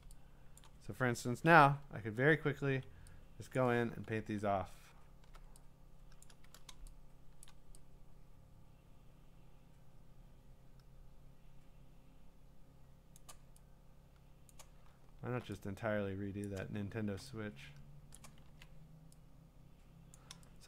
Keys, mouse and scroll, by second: 0.2-0.6 scroll, 0.6 click, 1.6-2.9 ], 3.6 click, 4.1-5.3 scroll, 6.2 click, 7.2 click, 7.5 click, 13.1 click, 14.5 click, 14.9 scroll, 16.5 click, 16.8 scroll, 18.1 click, 18.5 ctrl+z, 20.1 click.